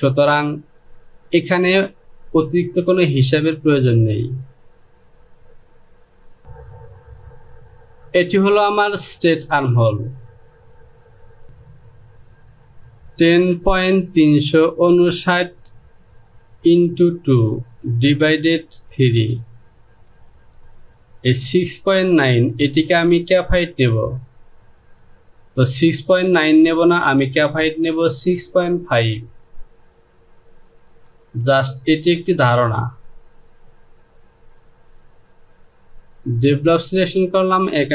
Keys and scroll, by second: 6.4 space.